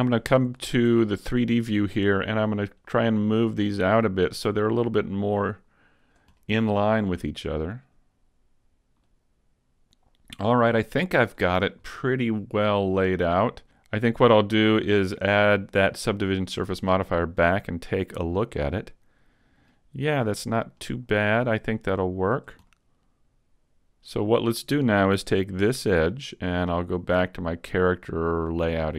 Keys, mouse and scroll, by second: 0.1-0.8 scroll up 2, 0.6 shift+middle click, 1.1 middle click, 2.8 click, 4.7 right click, 5.4 click, 6.4 scroll up 1, 6.6 middle click, 7.8 right click, 9.1 click, 10.1 middle click, 10.1 scroll down 3, 10.7 middle click, 11.5-12.2 scroll up 2, 12.0 middle click, 16.0 click, 16.6 middle click, 20.8 right click, 21.7 click, 22.7 middle click, 24.4 a, 25.5 alt+right click, 26.1 middle click, 27.4 click.